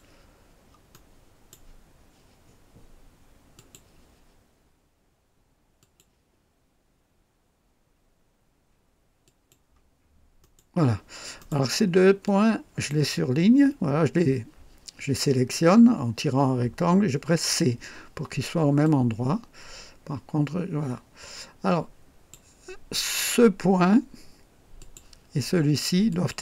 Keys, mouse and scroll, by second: 0.9 right click, 3.5 click, 5.8 click, 9.2 click, 10.4 right click, 11.4 right click, 12.2-13.1 drag, 17.3 c, 18.8 click, 24.8 click, 26.1 click.